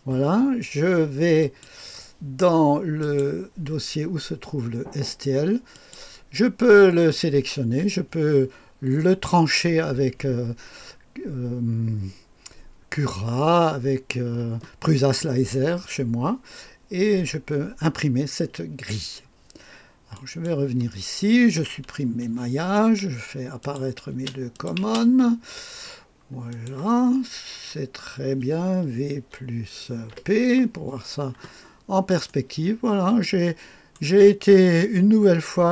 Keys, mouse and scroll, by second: 1.4 click, 2.2 click, 3.0 click, 5.8 click, 20.1 click, 22.0 Delete, 23.6 click, 24.1 space, 24.6 click, 24.8 space, 25.4-26.5 scroll down 1, 26.5 click, 27.1-27.8 scroll down 1, 27.8-28.8 scroll up 1, 29.2-30.1 typing, 31.6-32.3 scroll up 1, 32.3-34.2 drag, 32.3-33.7 scroll up 1, 34.9 click, 35.0-35.7 typing.